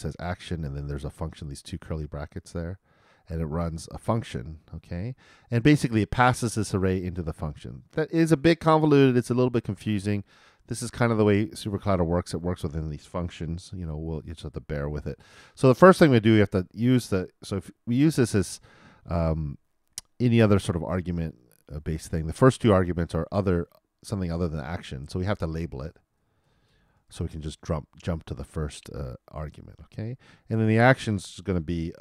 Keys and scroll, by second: 13.9 shift+super+=, 27.2-28.1 typing.